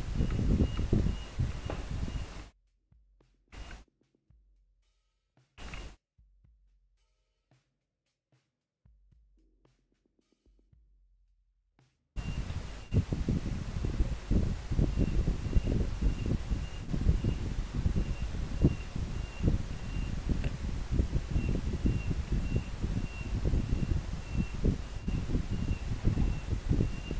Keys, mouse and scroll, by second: 13.6 scroll down 1, 16.0 scroll down 1, 16.5 scroll up 1, 17.2 scroll down 1, 18.2 scroll up 1, 19.4 scroll down 1, 21.0 scroll up 1.